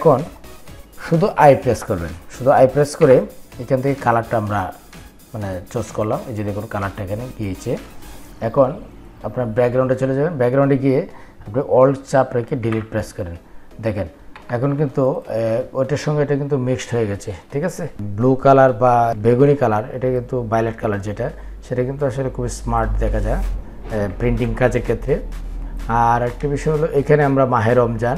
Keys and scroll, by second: 0.7 i, 12.5 alt+Delete.